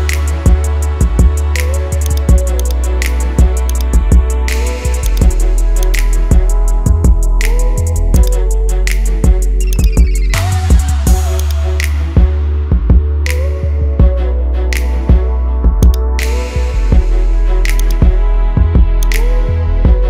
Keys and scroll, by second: 7.4 ctrl+z, 19.7 ctrl+z.